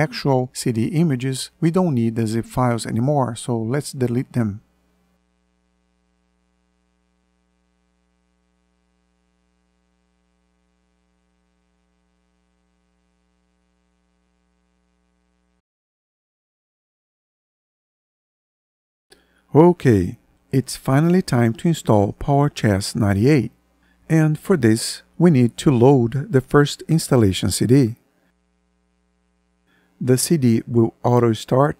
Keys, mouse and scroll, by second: 3.2 Delete.